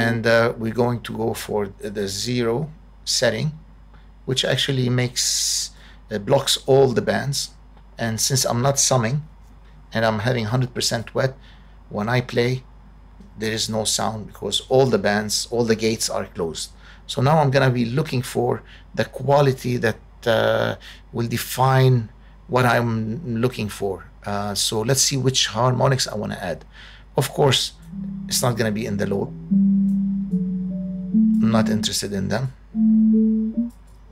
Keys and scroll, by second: 12.3 space.